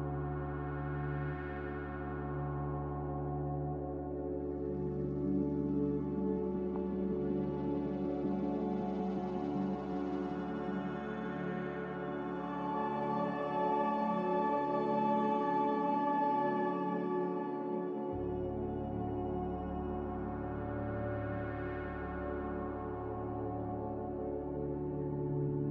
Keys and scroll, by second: 0.9 a, 6.6 ctrl+c, 10.0 ctrl+v, 11.1 g, 13.5-14.1 typing, 15.4 a, 18.1 m, 22.0 Delete, 22.0 z, 24.7 Delete.